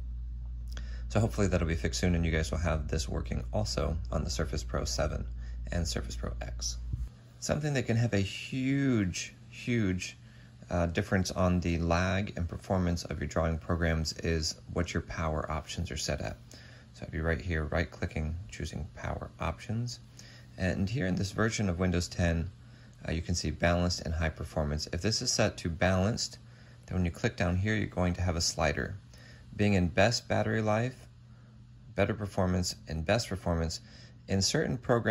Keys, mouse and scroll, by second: 17.7 right click.